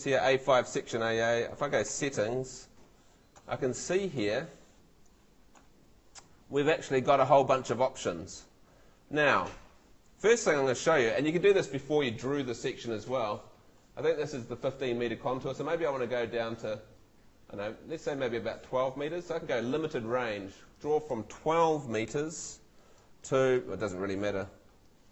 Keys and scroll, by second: 22.0 1, 23.0 2.